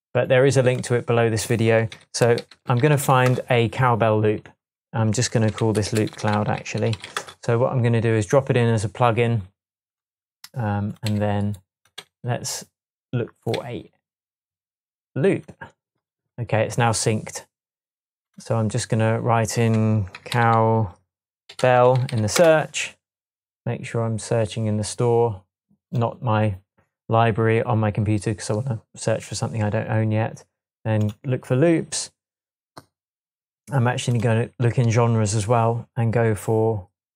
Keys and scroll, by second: 2.0-3.5 typing, 5.5-7.6 typing, 11.1 Left, 12.0 Right, 13.6 Right, 20.1-22.5 typing.